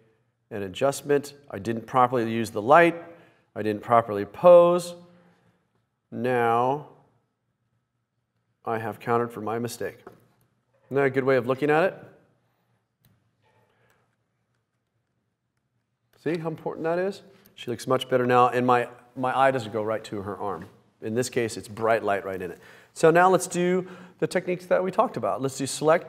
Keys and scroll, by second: 14.1 super+z, 15.0 super+z, 15.2 super+z.